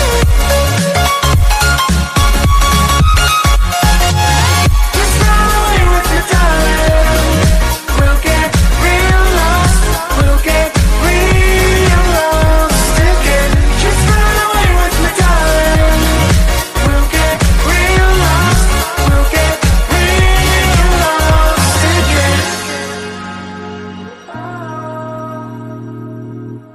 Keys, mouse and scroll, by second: 3.4 click, 3.8-4.1 scroll down 1, 4.1 click, 4.8 scroll down 1, 5.2 click, 6.5 click, 6.9-7.7 scroll up 2, 7.7 click, 8.1 click, 8.9 click, 10.0 click, 10.5 click, 11.7 g, 15.0 click, 16.2 g, 19.1-19.8 drag, 20.6 click, 20.9 click, 21.7 click, 22.1 KP_1, 22.7 KP_7, 23.0 KP_9, 24.2 click, 24.9 shift+d.